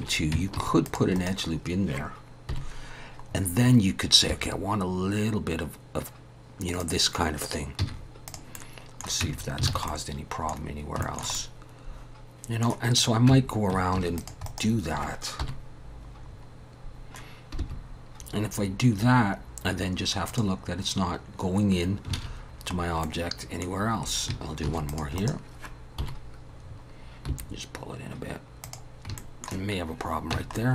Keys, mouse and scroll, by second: 0.0 Tab, 0.0 alt+a, 0.0 click, 0.6 ctrl+r, 2.5 KP_7, 3.3-3.8 scroll up 5, 4.3 g, 7.8 z, 8.5 middle click, 9.2 Tab, 9.4 scroll down 3, 9.7 alt+a, 9.9 middle click, 10.6 scroll down 2, 11.0 shift+middle click, 11.3 middle click, 13.0 click, 13.3 Tab, 13.9 ctrl+r, 15.4 KP_7, 16.3 scroll up 3, 17.1 scroll up 2, 17.6 g, 21.8 scroll down 2, 22.2 alt+a, 23.0 middle click, 23.8-24.3 scroll down 3, 24.6 ctrl+r, 26.0 KP_7, 26.6-26.9 scroll up 4, 27.3 g, 29.2 shift+middle click, 30.3 Tab, 30.6 middle click.